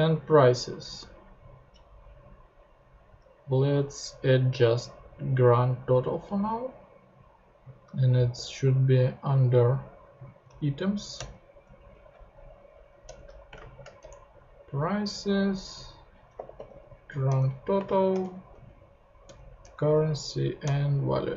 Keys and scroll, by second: 11.1 Return, 11.9 p, 13.0 Return, 13.5 space, 13.7 shift+[, 14.0 shift+Return, 16.1-18.5 typing, 17.3 Return, 18.2 shift+Return, 19.2 Return, 19.6-20.6 typing, 20.6 Return.